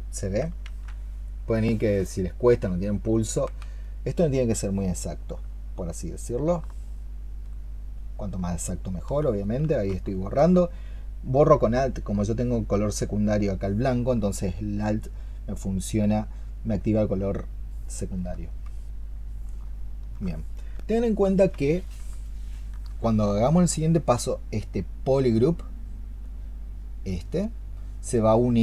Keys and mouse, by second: 1.0 ctrl+z, 3.0 ctrl+z, 6.6 alt+click, 7.2 alt+click, 8.3 alt+click, 8.7 alt+click, 10.4 alt+click, 22.1 alt+click.